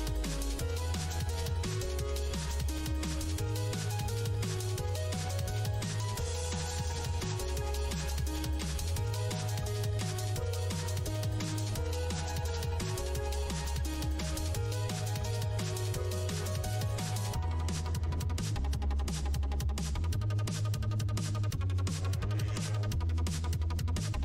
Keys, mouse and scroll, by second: 3.7 scroll down 1, 5.2-5.8 scroll down 1, 8.3 click, 11.1 scroll down 1, 12.6 scroll down 1, 13.9 scroll down 1, 15.0 scroll down 1, 17.4 scroll down 1, 19.2-19.6 scroll down 1, 19.8 scroll down 1, 20.5 scroll down 1, 22.3 click, 23.4 Tab.